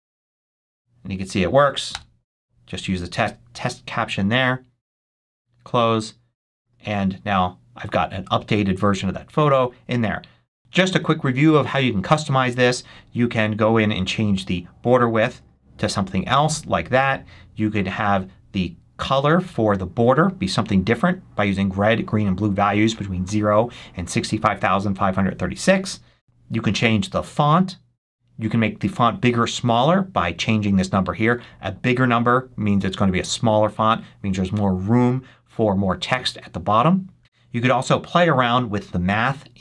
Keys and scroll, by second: 1.8 Return.